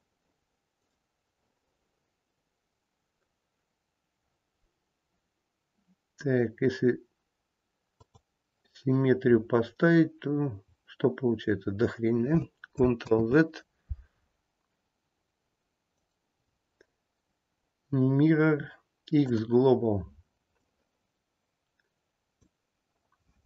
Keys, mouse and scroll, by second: 0.7 right click, 9.2-10.1 scroll down 3, 10.1-10.5 scroll down 1, 10.5-11.1 scroll down 1, 11.1 scroll down 1, 11.2-12.3 scroll up 3, 12.3-12.7 scroll up 1, 13.0 ctrl+z, 15.9 right click, 20.5 click.